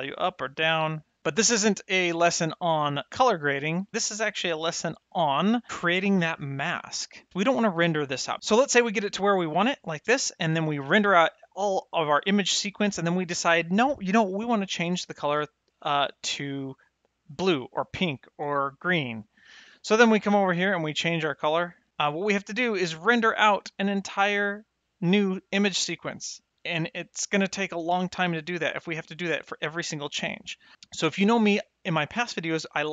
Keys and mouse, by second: 10.1 middle click, 18.7 click.